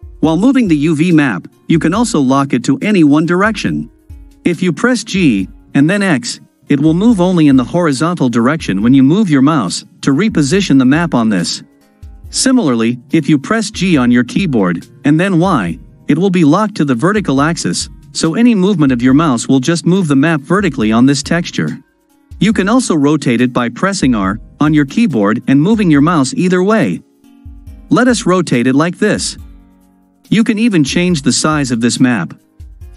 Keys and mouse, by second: 4.0 g, 14.5 g, 24.2 r.